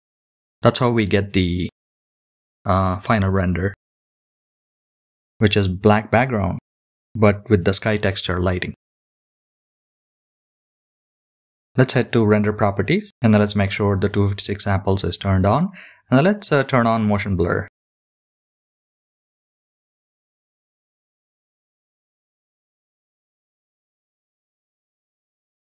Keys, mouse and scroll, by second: 5.5-6.9 drag, 11.3 click, 12.9-14.5 scroll down 2, 14.6-15.3 scroll down 5, 16.1 click, 16.9 click, 19.2 click, 19.8 scroll down 4, 20.7-22.1 scroll down 6, 22.1-23.2 scroll up 10, 23.6-24.9 scroll up 2, 25.0-25.4 scroll up 3.